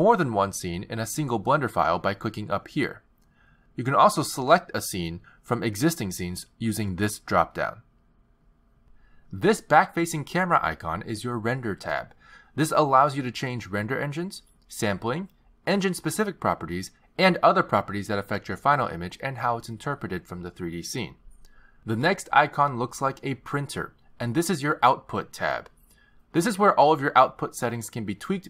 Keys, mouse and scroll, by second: 2.5 click, 5.1 click, 7.4 click, 8.5 click, 9.7 click, 24.8 click.